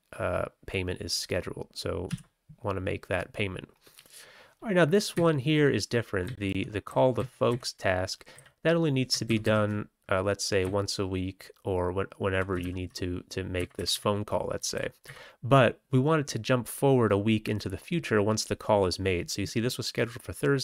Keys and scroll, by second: 2.1 q, 5.1 Up, 5.6 Up, 5.6 Up, 6.2 Down, 6.4 Tab, 6.8 Down, 7.1 Down, 7.4 Up, 8.3 Down, 9.2 ctrl+x, 9.4 ctrl+s, 10.5-12.3 Right, 11.1 Right, 12.5 ctrl+e, 13.5 Up, 13.7 Up, 13.8 Up, 14.5 Down, 14.7 Down, 15.0 Up.